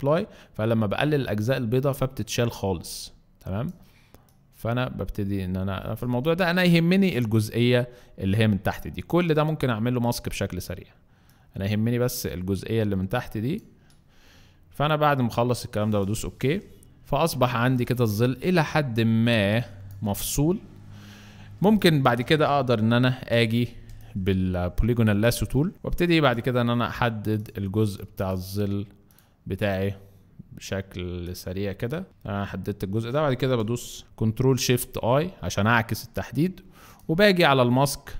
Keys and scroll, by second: 17.4 alt+space, 21.5 space, 22.9 l, 23.8 space, 25.7 Escape, 25.7 space, 25.7 d, 34.0 Escape, 34.0 i, 34.5 i.